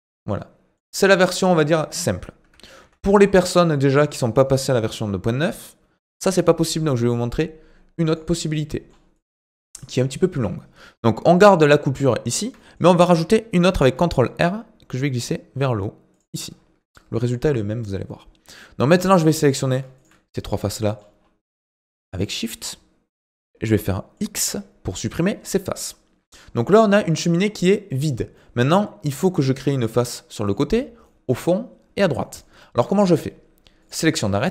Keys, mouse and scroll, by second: 2.8 ctrl+z, 3.7-6.9 shift+middle drag, 8.1 click, 8.5 middle click, 9.1 click, 10.3 KP_7, 10.9-11.3 scroll up 5, 11.3 shift+middle click, 12.2-12.6 scroll up 4, 12.6-13.7 shift+middle drag, 13.7 ctrl+r, 16.6 scroll down 3, 16.8 middle click, 17.4-18.9 scroll down 1, 18.9 click, 19.7 click, 20.0 shift+click, 20.3 middle click, 21.1-22.1 scroll down 5, 22.1 shift+click, 22.5 middle click, 23.3-23.9 scroll up 6, 23.9 middle click, 24.4 x, 25.4 middle click, 26.3 scroll up 2, 26.6-33.8 middle drag, 33.8 click, 34.4 scroll down 2.